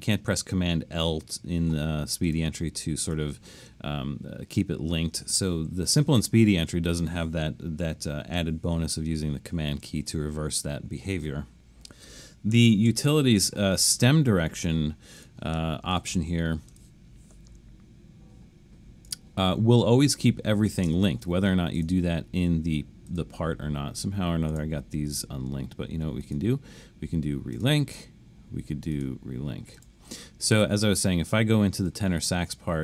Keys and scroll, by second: 12.7 super+-, 21.3 super+z.